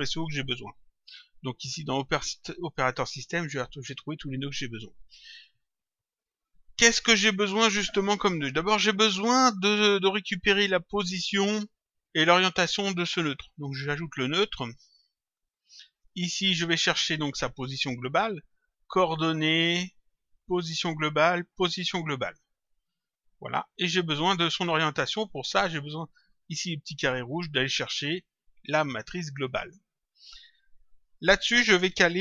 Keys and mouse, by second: 2.7 click, 13.7 click, 15.4 click, 17.6 click, 22.0 click, 24.1 click, 27.1 click, 29.2 click.